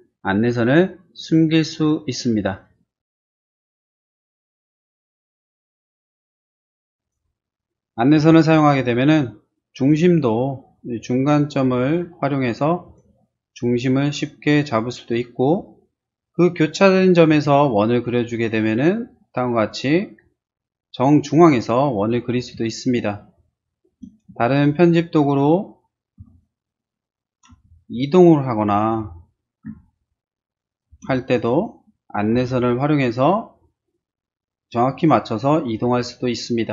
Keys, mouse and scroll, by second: 1.2 click, 3.0 click, 3.4 click, 4.7 space, 5.7 click, 5.7 e, 6.0 click, 6.2 click, 6.6 click, 7.0 click, 8.2 t, 8.7 middle click, 9.9 click, 11.8 click, 12.8 click, 14.1 click, 16.2 middle click, 16.2 scroll up 1, 17.3 c, 17.9 click, 19.2 click, 22.0-22.3 scroll down 2, 22.1 middle click, 22.8 middle click, 24.5 middle click, 26.2 e, 26.3 click, 27.5 r, 27.9 click, 28.6 click, 29.7 p, 29.9 click, 30.6 click, 30.9 space, 31.2 click, 31.3 click, 31.5 click, 32.3 m, 33.2 click, 34.9 click.